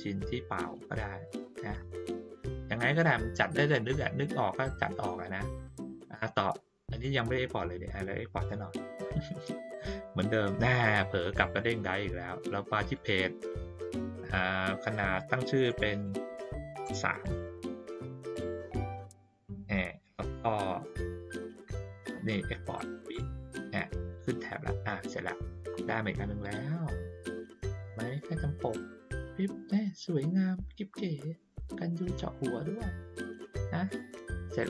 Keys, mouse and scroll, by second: 3.6 ctrl+middle click, 4.7-5.5 drag, 7.1 click, 9.1 click, 12.8 click, 15.6 click, 22.8 click, 26.4 click, 27.8 click, 28.0 click, 33.8 click.